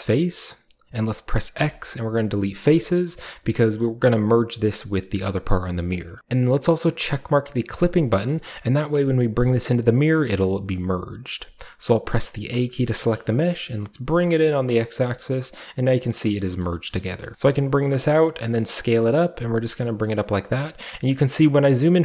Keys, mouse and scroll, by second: 0.0-1.6 shift+right drag, 1.6 typing, 2.6 click, 5.1-6.1 scroll up 1, 6.1 scroll up 1, 6.3 click, 7.7 click, 13.5 typing, 13.7-15.0 middle drag, 14.7 click, 15.0-16.4 scroll up 1, 15.0 typing, 16.1 click, 16.1 middle click, 16.6 middle click, 16.9 middle click, 17.2 middle click, 17.3 typing, 17.8 click, 18.4 typing, 18.8 click, 19.2-19.6 scroll down 1, 19.6-21.1 scroll up 1, 19.8 typing, 20.2 click, 21.1-21.8 scroll down 1, 21.8-22.0 scroll down 1.